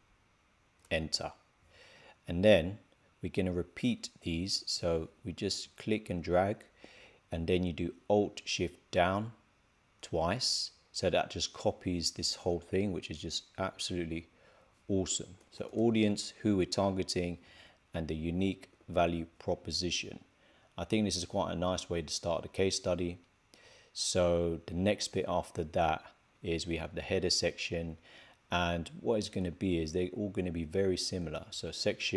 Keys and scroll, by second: 14.8 shift+a, 18.4-19.5 typing.